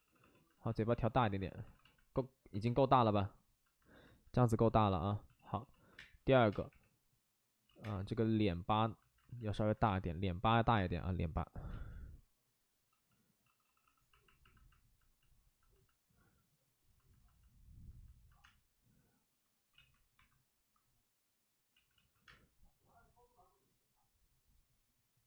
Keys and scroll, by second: 0.0 d, 0.1 d, 0.5 alt+s, 1.2 alt+s, 1.6 alt+s, 4.7 alt+s, 5.3-6.6 typing, 7.6 ctrl+z, 7.7 space, 9.1 alt+s, 9.8 space, 10.7 space, 11.6 space, 12.9 d, 13.4 d, 13.6 d, 13.9 d, 17.5 d, 18.4 space, 19.7 ctrl+z, 20.1 1, 21.7 ctrl+z, 21.9 ctrl+z, 22.2 space.